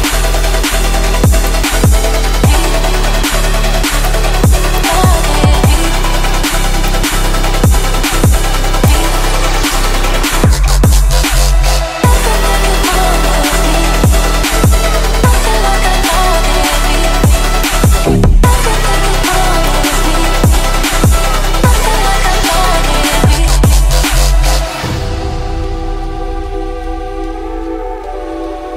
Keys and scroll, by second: 16.7 ctrl+t.